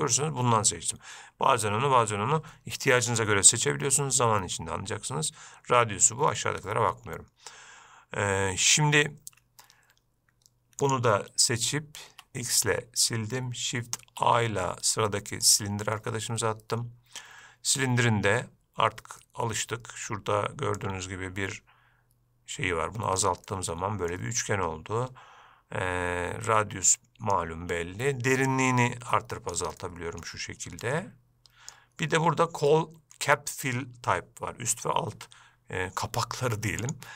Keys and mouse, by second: 9.5 Escape, 11.0 click, 12.3 x, 14.3 shift+a, 16.2-17.5 middle drag, 19.5 middle click, 21.1-23.5 drag, 23.7-24.4 middle drag, 26.8 click, 28.8-29.8 drag, 30.1-30.5 middle drag, 31.1 click, 32.9 middle click.